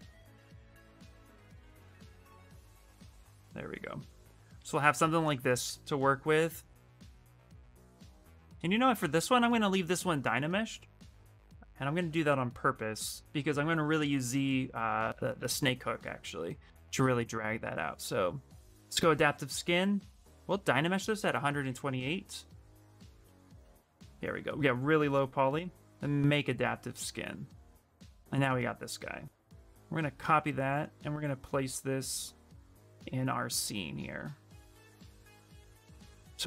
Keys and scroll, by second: 5.8 a, 6.9-9.7 typing, 17.7 q, 23.1 a, 23.3 a, 34.8 a.